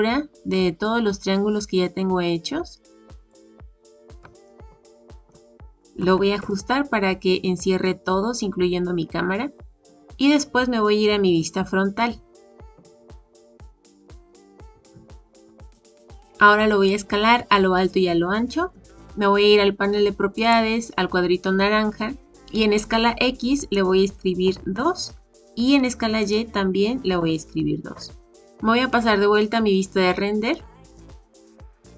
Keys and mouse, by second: 4.4-5.3 shift+middle drag, 6.0 s, 12.6 KP_1, 15.7-16.1 shift+middle drag, 20.4 click, 23.6-25.4 drag, 26.3-28.4 drag, 30.9 click.